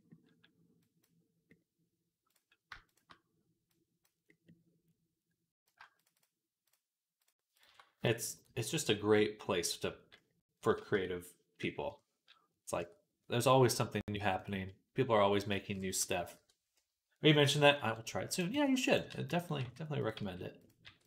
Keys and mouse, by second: 2.2-3.5 middle drag, 3.5-5.5 drag, 5.5 shift+middle click, 6.0 alt+shift+click, 6.0 alt+shift+middle click, 6.5 alt+shift+click, 7.4 alt+shift+middle click, 8.3-18.2 drag, 10.8 Tab, 11.7 KP_3, 12.6 Tab, 17.4-21.0 typing, 18.2-21.0 middle drag.